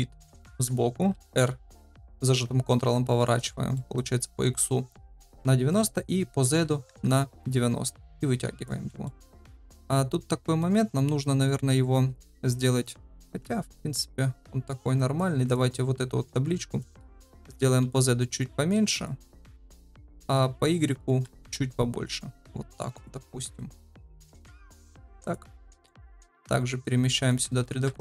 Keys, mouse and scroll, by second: 0.3 KP_3, 1.1 r, 3.7 middle drag, 5.7-7.4 drag, 8.1 click, 8.8 middle drag, 9.8-10.6 middle drag, 13.7 KP_1, 15.0 click, 15.7 middle drag, 16.7 middle drag, 17.3 s, 21.1 s, 23.5-24.7 drag, 25.2 click, 25.9-27.2 right drag, 27.6 shift+s.